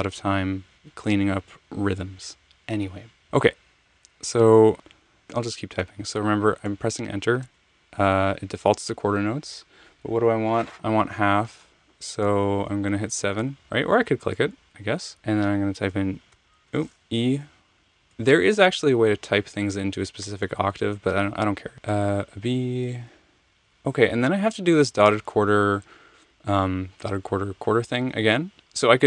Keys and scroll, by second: 7.4 Return, 13.4 7, 16.3 e, 18.0 alt+super+Down, 21.9 b.